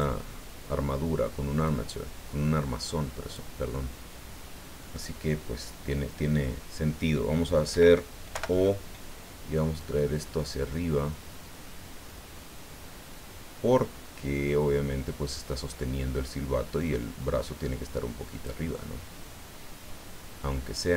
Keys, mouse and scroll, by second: 1.6-3.5 drag, 3.7-5.1 drag, 8.3 o, 9.8 click, 10.5 scroll down 1, 11.1-11.6 scroll down 1, 15.7-16.2 scroll down 1, 17.9 scroll down 1, 18.7-20.9 drag.